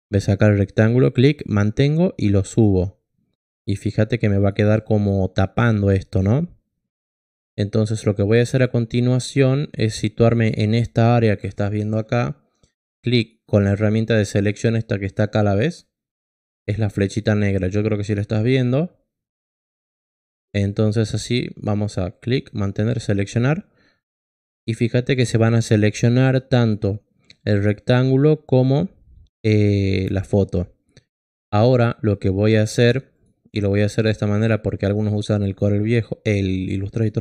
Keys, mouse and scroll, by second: 1.1-2.6 drag, 7.8 click, 12.8 click, 22.0-24.2 drag.